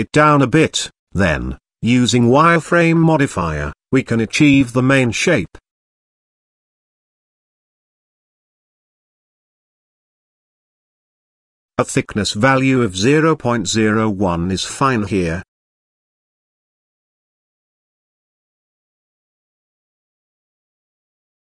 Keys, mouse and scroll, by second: 0.9 click, 2.1-6.5 drag, 7.0-7.6 middle drag, 7.9-8.3 scroll up 3, 8.7 scroll up 1, 11.6-13.4 drag, 14.1 scroll down 2, 14.6-15.6 middle drag, 16.2-16.8 scroll up 2, 18.5-19.1 scroll down 1.